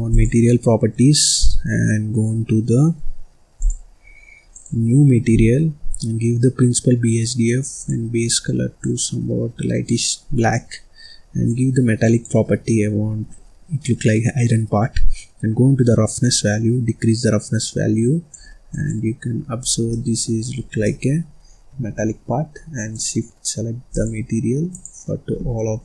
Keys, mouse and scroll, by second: 0.0 click, 3.5 click, 4.4-7.0 drag, 7.0 scroll down 1, 7.7 click, 10.3-11.4 scroll down 1, 11.4-14.4 drag, 16.2-18.8 drag, 19.5-19.8 scroll up 1, 19.8 middle click, 20.5-20.8 scroll up 1, 20.8-22.8 middle drag, 22.8 click, 23.8 click, 24.6 click.